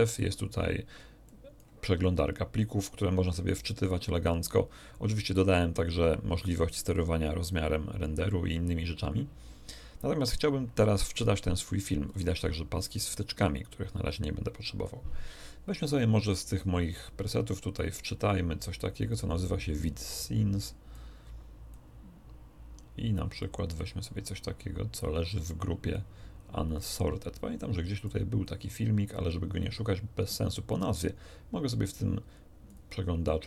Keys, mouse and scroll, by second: 0.2 scroll down 2, 0.5 scroll up 2, 1.2 click, 6.3 click, 7.4 click, 12.1 click, 13.0 click, 16.9-19.3 drag, 19.7 click, 20.9 click, 23.4-26.1 drag, 26.7 click, 28.0 click, 32.7 click.